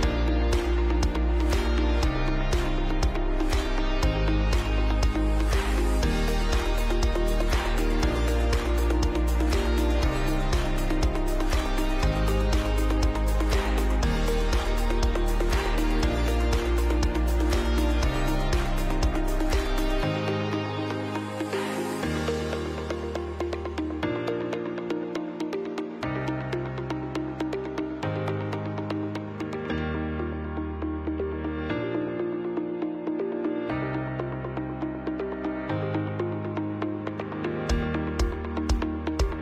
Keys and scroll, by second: 18.1 Up, 21.5 shift+Down, 24.7 ctrl+x, 25.7 ctrl+v, 27.0 ctrl+x, 28.2 ctrl+v, 29.3 ctrl+x, 30.3 ctrl+v, 38.9 space.